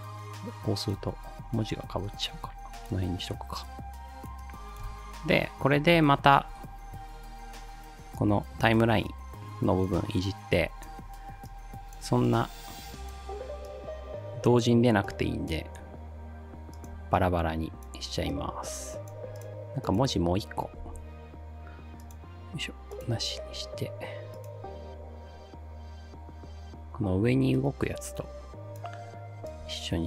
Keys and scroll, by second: 20.8 ctrl+d.